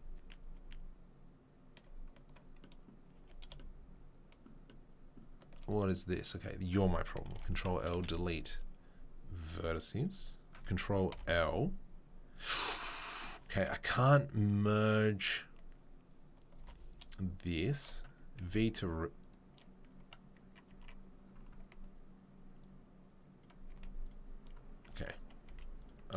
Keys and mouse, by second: 0.5 ctrl+z, 3.1 a, 5.7 click, 6.3-16.9 middle drag, 7.5 ctrl+l, 7.9 Delete, 11.2 ctrl+l, 16.9 click, 16.9 2, 17.0-22.6 shift+middle drag, 18.4 v, 20.7 Tab, 22.6-26.1 drag, 23.7 z, 25.5 z.